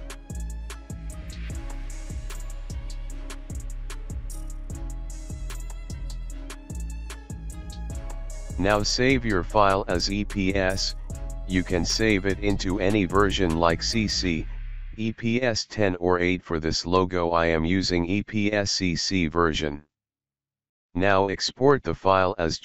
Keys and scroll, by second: 2.5 alt+space, 7.0-8.4 typing.